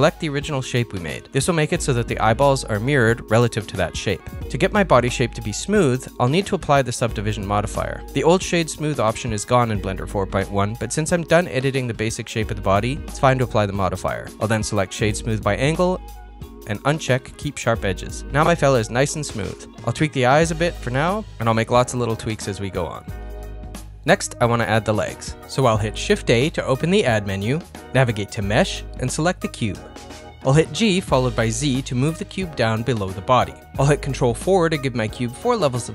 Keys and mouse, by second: 2.7 middle click, 4.2 middle click, 4.6 click, 4.9 middle click, 6.9-8.4 middle drag, 9.1 click, 9.8-14.5 drag, 14.9 click, 15.3-16.6 right drag, 17.7 click, 19.2 middle click, 20.0 KP_1, 21.6 s, 23.4 g, 24.6 KP_1, 26.1 shift+a, 31.5 g, 32.8 shift+middle click, 33.2 ctrl+middle click, 33.7 shift+middle click, 33.9 ctrl+middle click, 35.4 ctrl+4.